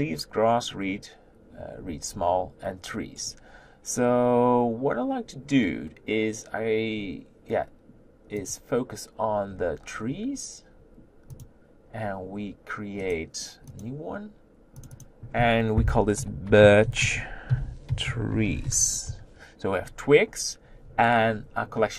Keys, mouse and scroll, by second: 13.8 right click, 14.9 click, 19.1 e.